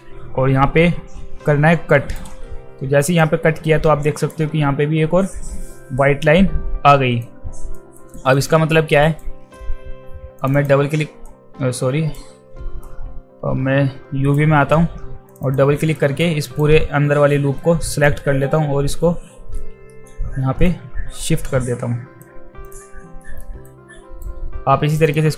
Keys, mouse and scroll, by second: 3.1 click, 5.3-7.2 alt+drag, 7.8 alt+right click, 8.3 alt+right click, 8.7 alt+middle click, 9.0 alt+right click, 10.4 click, 10.5 click, 11.2-12.1 right drag, 12.8-14.3 right drag, 15.3 click, 15.4 click, 16.0 alt+right drag, 16.4 alt+right click, 17.9 alt+right click, 18.5 w, 19.9 alt+middle click, 20.7-22.2 drag, 22.7 click, 23.2 alt+middle click, 23.7-24.2 alt+right drag, 24.9 click, 25.1 click.